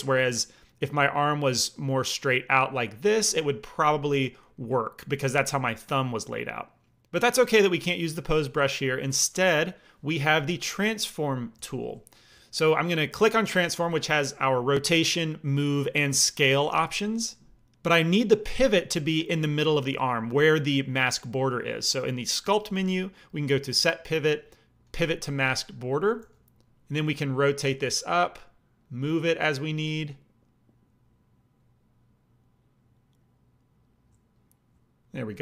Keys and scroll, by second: 0.2-2.9 d, 3.3 d, 11.5 f, 26.1 f.